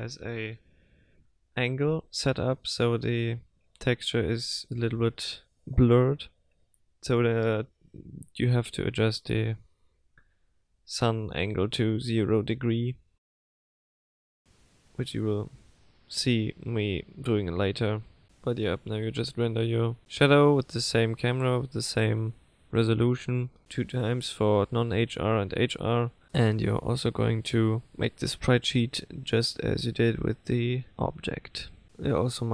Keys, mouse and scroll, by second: 6.1 click, 10.0 click, 13.0 click, 15.4 click.